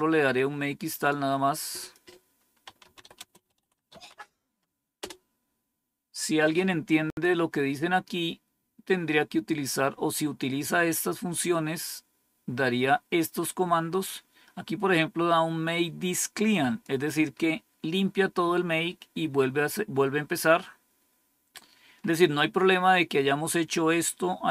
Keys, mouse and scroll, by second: 1.7 click, 2.3-4.7 typing, 7.9 scroll down 1, 14.8-16.7 drag, 21.2 scroll down 2, 22.4-24.4 scroll up 1, 24.4-24.5 scroll down 3.